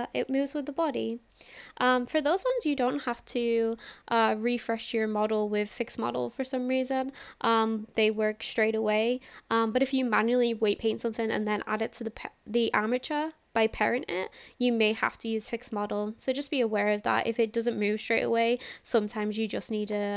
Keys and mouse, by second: 0.9 ctrl+z, 1.6 click, 2.5-3.4 shift+drag, 7.1-7.7 shift+middle drag, 8.2-9.3 shift+middle drag, 20.0-20.1 drag.